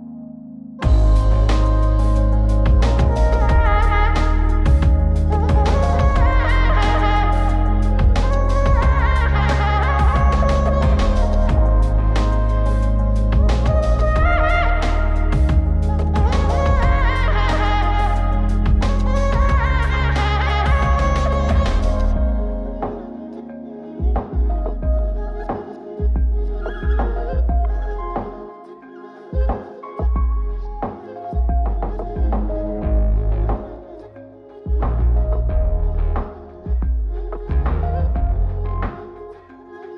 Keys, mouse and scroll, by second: 0.5 shift+q, 8.1 click, 9.0 shift+q, 11.4 shift+q, 13.5 shift+q, 16.8 shift+q, 19.1 click, 20.4 click, 23.9-24.9 drag, 26.1 shift+click, 27.2 shift+q, 30.0 click, 31.1 click, 32.0 click, 33.5 shift+q.